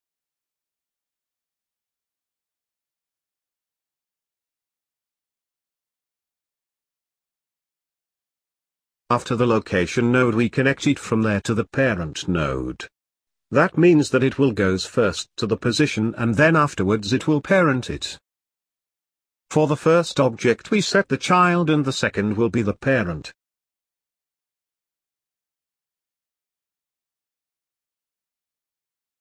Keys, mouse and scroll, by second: 0.1-1.3 scroll up 12, 1.3 click, 1.8 click, 2.2-4.0 middle drag, 4.0-5.0 scroll down 2, 5.0-5.8 scroll down 1, 23.7 click, 25.2-27.0 drag, 27.0 scroll down 3, 27.2-27.6 middle drag, 27.6-28.5 scroll down 1, 28.5 click.